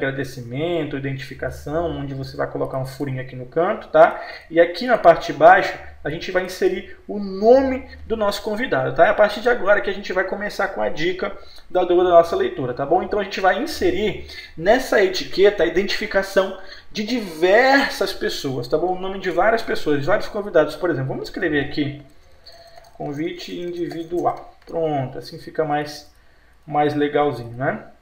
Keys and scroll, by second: 8.2 F4, 19.0 Delete, 21.3 F8, 24.8 ctrl+space.